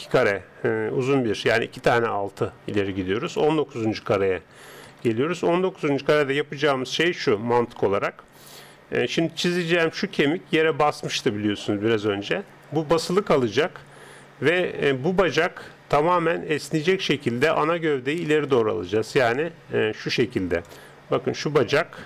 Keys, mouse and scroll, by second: 3.3 click, 9.4 d, 9.5 click, 11.2 d, 14.5 d, 17.6 right click, 18.5 click.